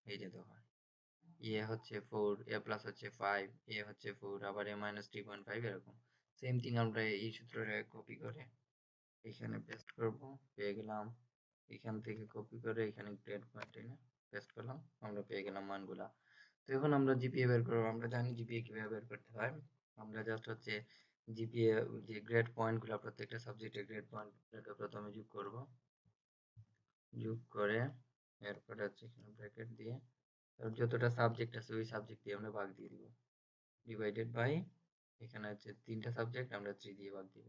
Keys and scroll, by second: 8.3 ctrl+c, 12.0 ctrl+c.